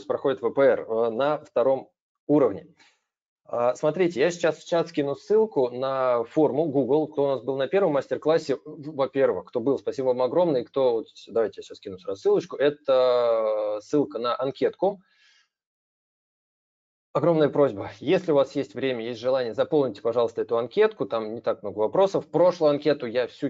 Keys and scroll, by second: 3.6 ctrl+v.